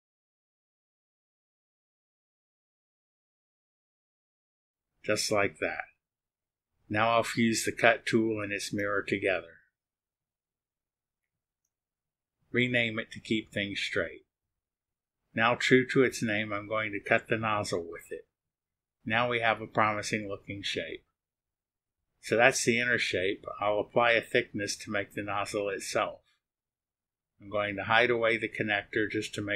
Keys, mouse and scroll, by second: 0.0 click, 2.5 click, 3.8 click, 4.2 click, 5.9 ctrl+click, 7.4 click, 7.9 ctrl+click, 8.3 ctrl+click, 9.6 click, 10.4 click, 10.7 right click, 11.0 click, 11.4-15.0 typing, 15.6 ctrl+click, 16.0 ctrl+click, 18.5 click, 21.6-27.8 drag, 29.0 click.